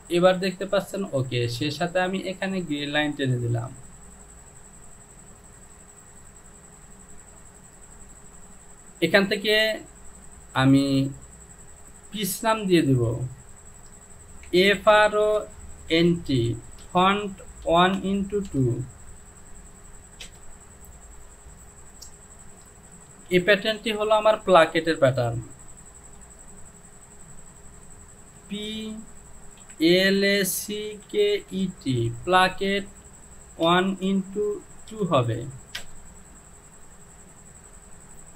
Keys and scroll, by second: 8.1 Home, 11.5 e, 14.7-18.5 typing, 20.3 Return, 21.6 j, 23.3 Home, 26.4 e, 30.6-32.5 typing, 33.7-35.0 typing, 35.9 Return.